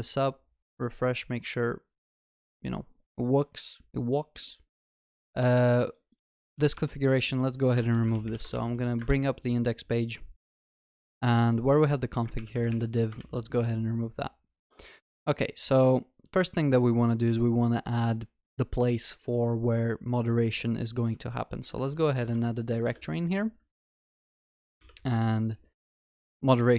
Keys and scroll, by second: 9.0 ctrl+shift+n, 12.4 ctrl+y, 13.2 ctrl+s, 21.8 alt+Insert.